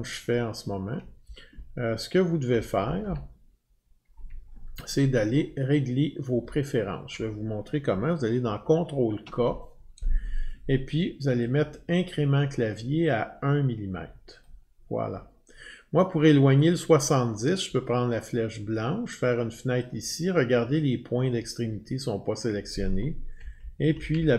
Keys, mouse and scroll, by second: 0.0-0.7 Up, 0.8 scroll down 10, 1.2-4.8 scroll down 8, 4.8 scroll up 3, 5.1-6.6 Up, 6.7 scroll down 10, 7.9 scroll up 1, 8.8 ctrl+k, 14.5 click, 16.7 click, 19.8 click, 23.4 Down, 23.6 Down, 23.8 Down, 24.0 Down, 24.2 Down, 24.2-24.3 scroll down 5.